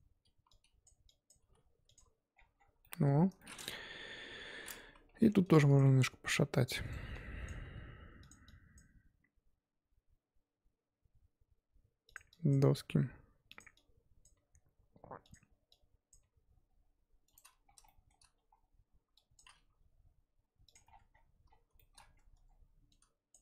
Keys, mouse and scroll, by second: 0.8 click, 1.2 click, 1.4 g, 1.9 Tab, 2.3-2.8 scroll down 8, 2.8 middle click, 3.1-4.0 scroll up 4, 3.4 middle click, 4.0 KP_1, 4.6 scroll up 1, 4.9 Tab, 5.1 1, 5.7 click, 5.8 g, 7.4 click, 7.6 g, 8.7 click, 9.3 g, 12.5 click, 12.5 g, 14.2 click, 14.3 g, 16.1 click, 16.2 g, 17.5-17.8 scroll up 6, 17.8 shift+middle click, 18.3 scroll up 3, 19.3 shift+click, 19.7 g, 20.8-21.8 scroll down 14, 21.8 shift+middle click, 22.0-22.9 scroll up 6, 22.3 Tab, 23.3 click.